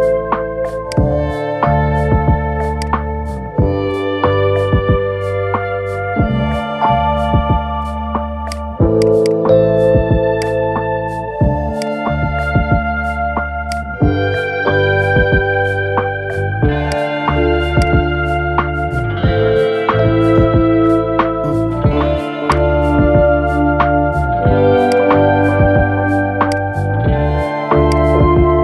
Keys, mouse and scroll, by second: 0.6-3.7 drag, 4.4 scroll up 2, 5.0-5.6 shift+middle drag, 6.3 Tab, 8.2 click, 8.8 alt+shift+click, 10.1 alt+shift+click, 10.8 ctrl+z, 11.5 alt+shift+click, 12.0 middle click, 12.9 ctrl+z, 13.5 alt+shift+click, 13.9 scroll up 1, 14.0-16.6 middle drag, 16.6 alt+shift+click, 17.5 alt+shift+click, 18.4 middle click, 19.3 scroll down 3, 19.6 shift+middle click, 20.1 scroll up 2, 21.0-22.2 shift+middle drag, 22.2 alt+shift+click, 23.2 scroll up 1, 23.5-24.6 middle drag, 24.6 alt+shift+click, 25.2-26.3 middle drag, 26.3 alt+shift+click, 27.6-28.6 drag.